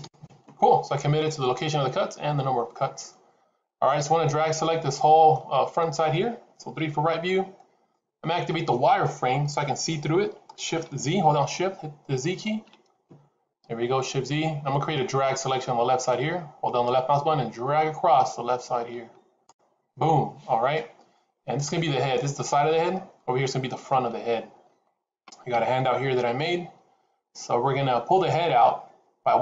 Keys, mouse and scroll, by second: 4.3 middle click, 6.7 KP_3, 13.0 shift+z, 16.7 click.